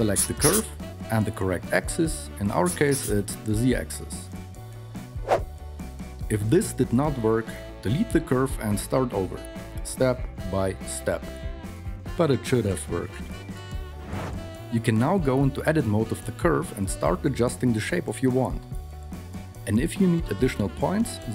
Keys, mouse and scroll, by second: 6.4 KP_3, 6.9 Tab, 8.7 alt+z, 9.5 Tab, 9.9-11.1 typing, 11.2 Tab, 14.3 Tab, 14.3 KP_3, 15.2 alt+z, 20.0 r, 21.0 r.